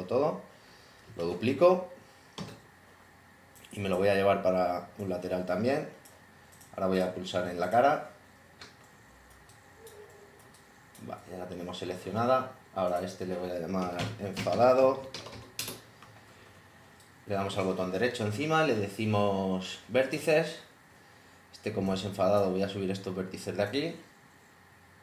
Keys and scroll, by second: 1.1 super+d, 3.6 super+w, 13.6-15.8 typing.